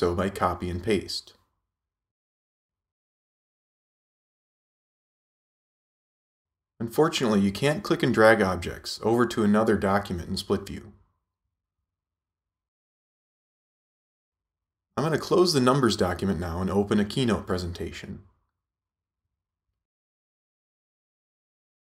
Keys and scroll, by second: 2.3 Return, 3.2 super+v, 13.6 super+z.